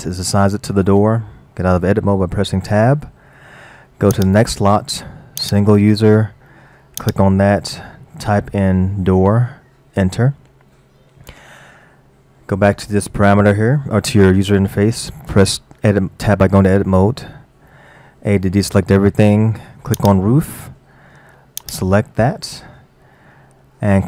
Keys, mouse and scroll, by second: 2.7 Tab, 4.2 click, 5.4 click, 7.0 click, 8.9 o, 10.7-11.2 scroll down 3, 17.0 Tab, 18.4 a, 20.0 click, 21.6-24.0 drag.